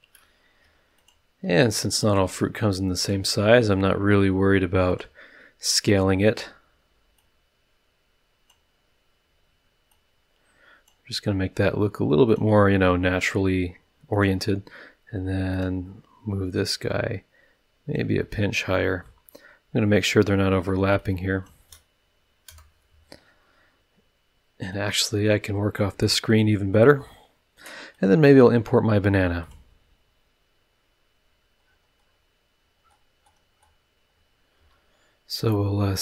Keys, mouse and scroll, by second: 0.6 s, 1.0 click, 1.4 s, 1.9 click, 2.2 s, 3.0 click, 3.4 s, 4.9 click, 7.1-8.7 drag, 9.9-11.0 drag, 12.2 click, 14.1 click, 15.5 click, 16.7-18.1 drag, 18.2-19.2 drag, 19.2 middle click, 21.0-21.6 drag, 22.5 KP_0, 24.7-25.9 drag, 26.3 click, 27.9 click, 29.4 click, 30.8-32.3 scroll down 3, 32.8-33.8 scroll up 6, 34.1 scroll down 2, 34.5 s, 35.4 click, 35.8 s.